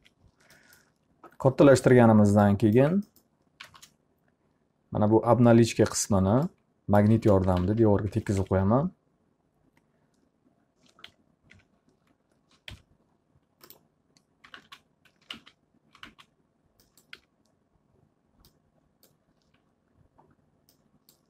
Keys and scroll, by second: 1.7 w, 3.6 space, 7.2-8.1 typing, 8.4 F3, 14.2-16.5 typing, 17.2 F3.